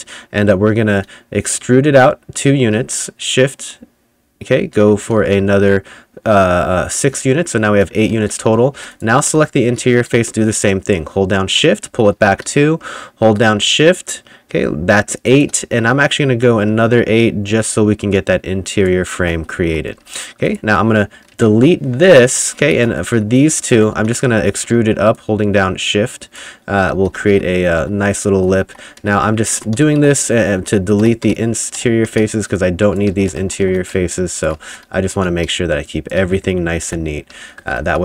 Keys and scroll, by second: 1.0 a, 8.2-10.2 typing, 11.9 s, 12.2 w, 19.0-20.6 typing, 21.6 Delete, 22.2-24.4 typing, 26.8-35.7 typing, 36.9 Delete, 37.1-38.0 typing.